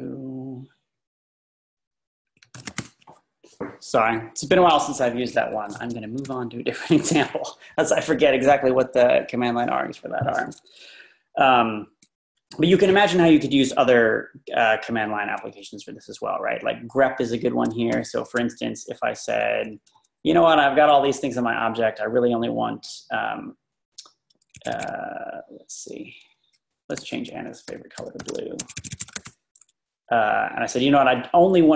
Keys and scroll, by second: 0.0 Up, 0.1-1.0 Up, 1.6 Up, 1.7 Up, 1.9 Up, 2.4-3.2 typing, 6.3 Up, 6.9 Down, 17.9 v, 19.7 Down, 19.8 Down, 19.9 Down, 24.7 Escape, 24.8 Escape, 24.9 Right, 25.3 typing, 25.5-26.3 Right, 27.5-29.6 typing, 30.8 Up, 30.9 Up, 31.1 Up.